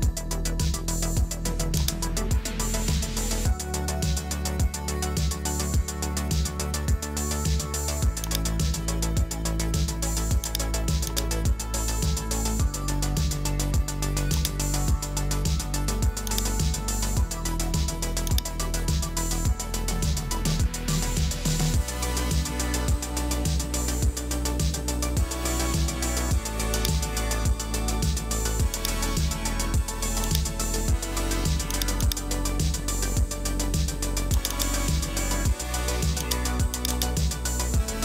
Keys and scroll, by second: 6.0 Return, 22.4 Return.